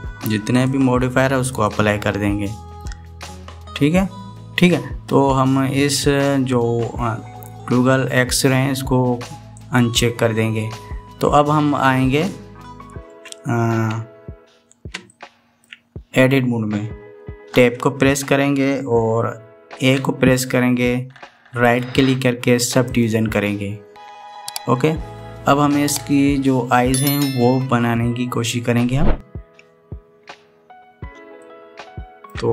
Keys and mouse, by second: 1.3-2.5 drag, 10.3 click, 13.9 KP_1, 15.9-16.5 shift+middle drag, 18.3 Tab, 20.6 a, 22.4-23.9 drag, 32.2 shift+middle click.